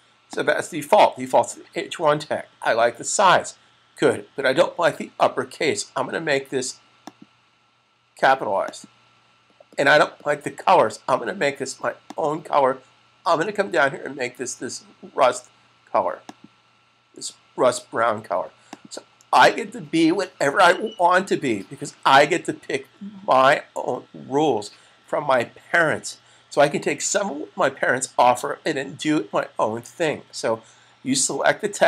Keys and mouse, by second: 0.2 click, 6.9 click, 12.0 click, 16.1 click.